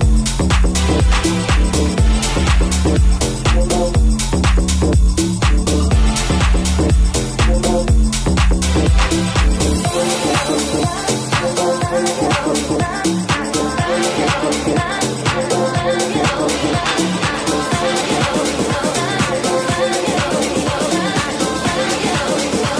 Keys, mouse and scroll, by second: 2.0 Tab, 4.4 alt+z, 4.6 c, 5.6 alt+z, 6.4 g, 7.7 right click, 7.7-10.2 middle drag, 10.2 alt+right click, 10.3 alt+middle click, 10.6 alt+right click, 10.7-16.8 alt+middle drag, 12.6 alt+z, 12.8 c, 14.1 alt+z, 15.3 g, 16.8 right click, 16.9-19.8 middle drag, 19.8 alt+right click, 19.8-22.7 alt+middle drag, 21.2 alt+z, 21.4 c, 22.1 alt+z, 22.6 g.